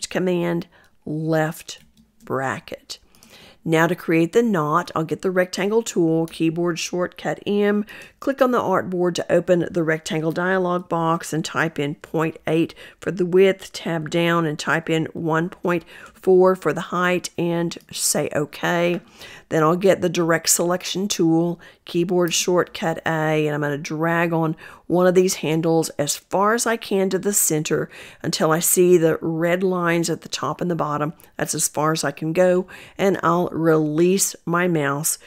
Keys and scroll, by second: 4.5 m, 19.4 a.